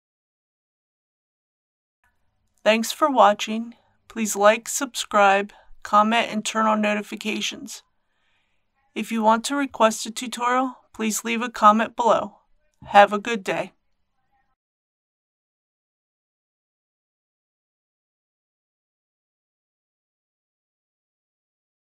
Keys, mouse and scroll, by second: 0.7 click, 1.5 middle click.